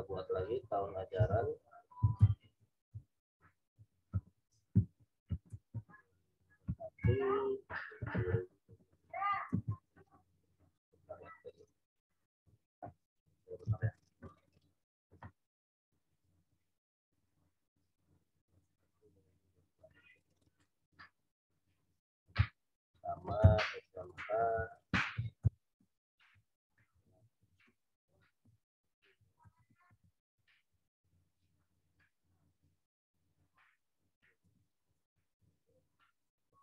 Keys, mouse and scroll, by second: 1.1-6.9 typing, 9.3 typing, 9.5 alt+Tab, 11.9 click, 13.6 alt+Tab, 16.0 click, 23.3 t, 24.0 click, 24.6-30.5 typing, 31.5 click, 34.3 t, 34.8 click.